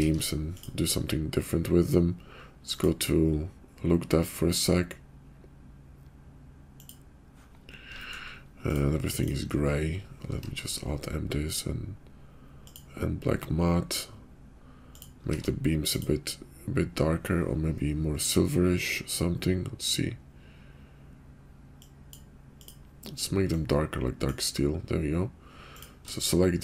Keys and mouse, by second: 0.0 alt+m, 3.0 click, 6.8-7.4 drag, 8.0 shift+click, 8.7 click, 9.2 click, 10.4 alt+m, 15.3 alt+m, 21.8 click.